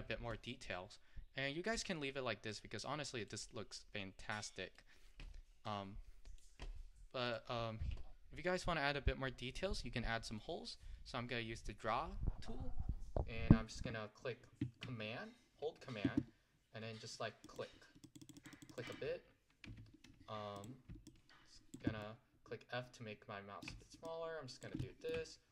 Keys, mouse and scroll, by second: 2.6 click, 3.5-5.7 middle drag, 5.7-8.2 drag, 8.2-8.7 scroll up 3, 8.7-17.5 middle drag, 17.5-19.8 drag, 19.8 f, 21.1 click, 22.1-23.7 middle drag, 24.1 click, 24.9 middle click.